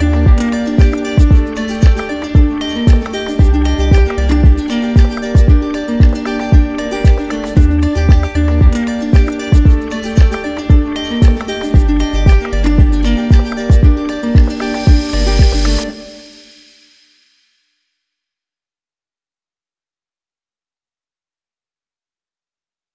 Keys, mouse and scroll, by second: 0.1 click, 0.2 click, 3.7 click, 3.9 ctrl+z, 5.6 click, 7.0 click, 9.2 click, 9.5 ctrl+z, 10.9 click, 16.5 z.